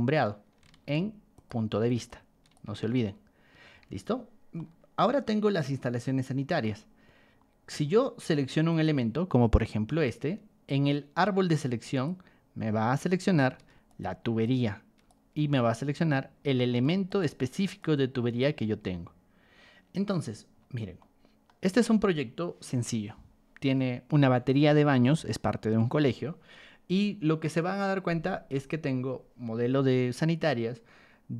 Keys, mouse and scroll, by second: 0.9 ctrl+1, 1.3 click, 2.0 ctrl+click, 2.6 Escape, 3.7 Escape, 4.5-6.6 shift+middle drag, 7.2 middle click, 8.7 click, 10.7-11.6 scroll up 2, 11.6 click, 12.3 middle click, 13.5 ctrl+1, 13.8 click, 14.4 ctrl+click, 15.3 Escape, 15.8 middle click, 16.1 middle click, 16.7 ctrl+1, 17.0 click, 17.8 ctrl+click, 18.6 Escape, 19.7 scroll down 2, 19.7 scroll up 2, 19.9 scroll down 2, 20.0 scroll up 2, 20.1 scroll down 2, 20.3-20.7 scroll up 2, 21.0 middle click.